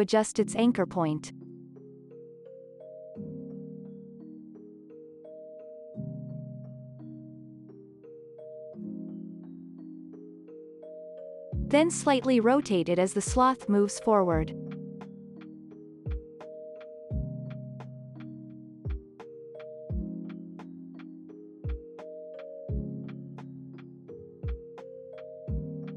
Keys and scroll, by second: 4.1 y, 6.8 ctrl+s, 8.2 ctrl+a, 11.3 ctrl+s, 12.7 u, 13.2 ctrl+s, 14.4 r, 16.1 x, 21.5 ctrl+s, 22.9 space, 23.4 v.